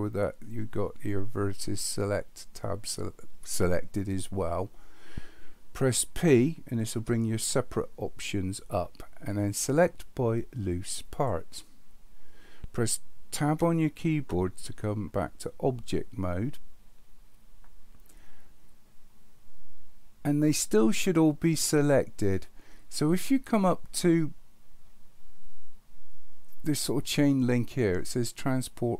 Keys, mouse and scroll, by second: 7.0 p, 13.5 Tab.